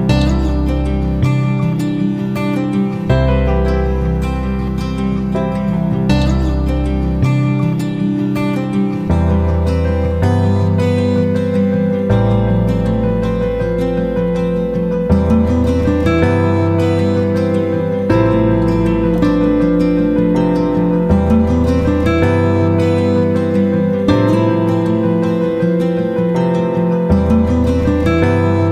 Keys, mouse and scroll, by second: 3.5 click, 12.1 right click, 13.2-25.1 drag, 25.7 Down, 26.0 Down, 26.2 Down, 26.4 Down, 26.5 Down.